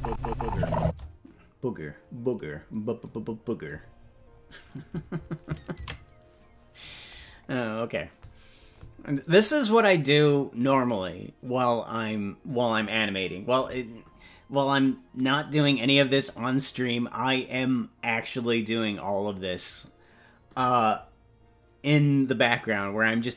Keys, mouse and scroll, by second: 0.8 space, 4.0-4.7 scroll down 6, 8.1 ctrl+s.